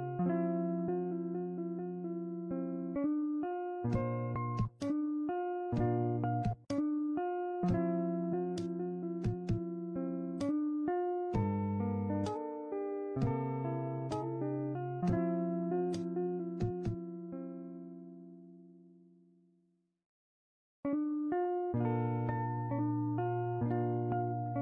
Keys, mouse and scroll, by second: 1.2 click, 2.9 click, 3.3-4.6 scroll down 1, 4.6 scroll down 1, 4.7 click, 6.8-9.6 drag, 10.9 a, 13.8-14.8 right drag, 14.8 click, 17.3 click, 17.7 middle click, 17.9 click, 18.1 scroll up 3, 18.2 middle click, 18.8 middle click, 18.9 ctrl+z, 19.0 middle click, 19.2 ctrl+z, 19.4 scroll up 3, 19.5 click, 19.7 scroll down 1, 20.3 middle click, 20.9 click, 21.2 a, 21.3-21.9 scroll down 2, 21.5 click, 21.9 click, 22.0 middle click, 22.5 right click, 22.7 ctrl+z, 22.9 a, 23.0 ctrl+z, 23.2 a, 23.4 right click, 23.8 click, 24.1 shift+middle click, 24.4 middle click.